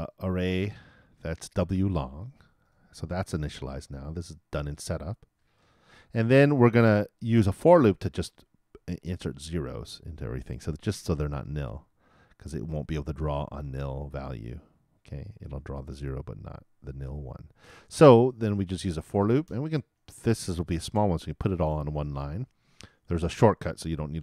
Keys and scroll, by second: 20.9 shift+9.